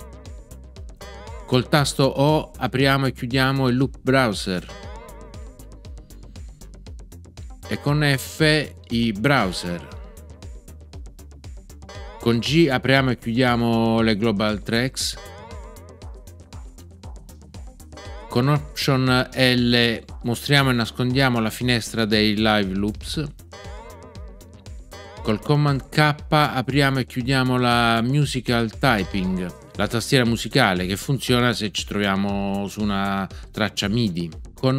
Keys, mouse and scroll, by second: 4.6 o, 7.6 o, 9.3 f, 11.8 f, 15.1 g, 17.9 g, 23.5 alt+l, 28.9 super+k.